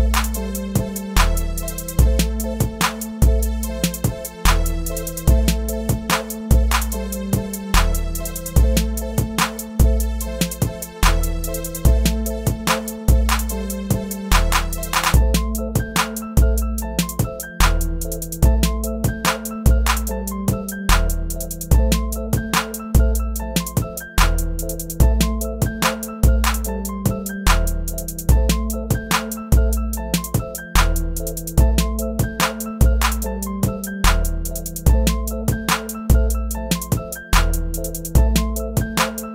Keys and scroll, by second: 15.7 Return, 26.9 shift+Return, 28.7 shift+Return, 30.2 shift+Return, 32.6 shift+Return, 34.8 shift+BackSpace, 35.2 shift+Return, 35.8 shift+Return.